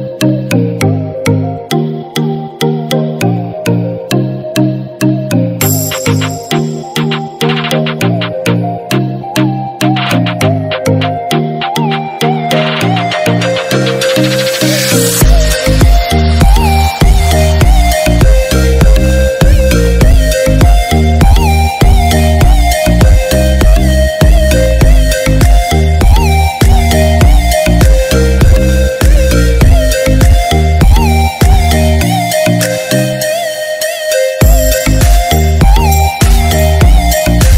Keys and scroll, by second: 2.7 ctrl+-, 27.2 ctrl+=.